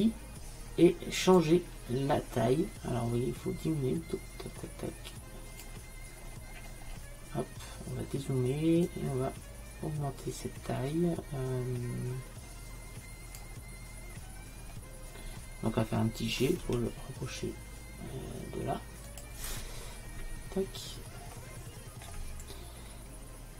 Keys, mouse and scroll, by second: 1.5-3.3 drag, 6.2 middle click, 6.4-8.9 middle drag, 8.9-10.4 drag, 10.5 click, 16.6 g, 21.4 middle click.